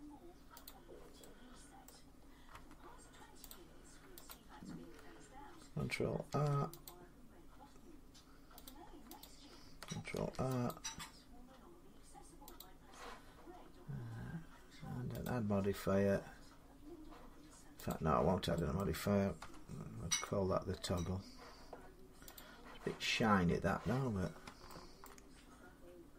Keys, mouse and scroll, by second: 0.5 click, 1.7 middle click, 3.3 click, 4.1 click, 6.1 ctrl+r, 6.7 click, 8.5 click, 9.4 click, 10.0 ctrl+r, 10.5 click, 12.4 click, 15.1 click, 17.7 click, 18.6 middle click, 19.3 Tab, 19.5 scroll down 3, 20.8 middle click, 20.9 middle click, 22.2 click, 24.9 shift+middle click, 24.9 scroll.